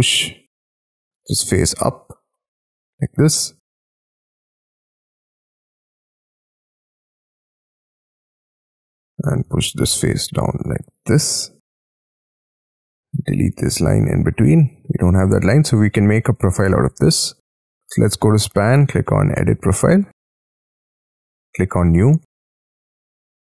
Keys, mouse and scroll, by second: 1.2 p, 1.7 j, 3.4 j, 3.7 middle click, 4.2 ctrl+shift+middle click, 4.9 shift+middle click, 5.4 space, 5.9 l, 6.4-6.8 scroll down 10, 7.0-8.1 scroll up 1, 8.4-9.4 scroll up 3, 9.4 p, 10.0 j, 11.1 middle click, 11.8 j, 13.6 shift+middle click, 14.2 shift+middle click, 14.9 space, 15.3 scroll down 7, 16.0 middle click, 16.5 double click.